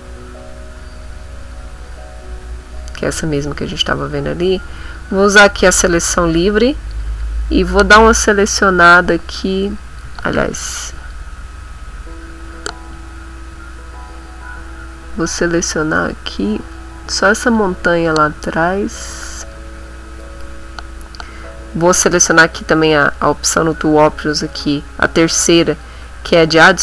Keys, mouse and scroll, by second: 1.0 click, 1.4 click, 2.1 middle click, 4.4 click, 6.5 middle click, 8.3-10.2 drag, 10.2 ctrl+z, 12.1-20.4 drag, 20.8 middle click, 22.4 click, 24.1 click, 25.7 click.